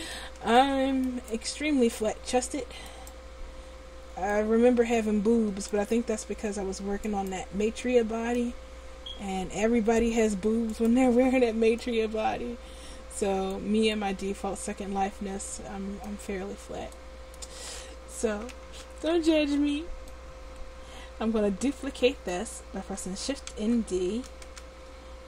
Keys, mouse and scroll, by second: 1.4 right click, 2.2 Tab, 6.2 ctrl+z, 8.6 click, 10.9-13.7 right drag, 12.1-13.7 drag, 15.6-16.8 drag, 19.4 l, 24.0 shift+d.